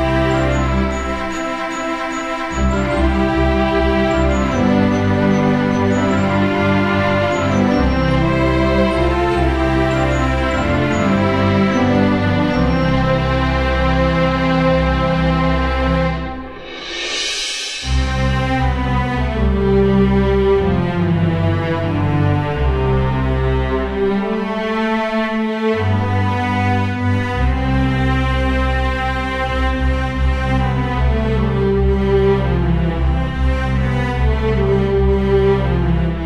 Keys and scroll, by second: 1.7 Delete, 1.9 ctrl+d, 2.2 space, 10.7 Delete, 11.0 ctrl+d, 11.1 space, 18.7 Delete, 19.0 ctrl+d, 19.2 space, 30.7 Delete, 31.1 ctrl+d, 31.4 space.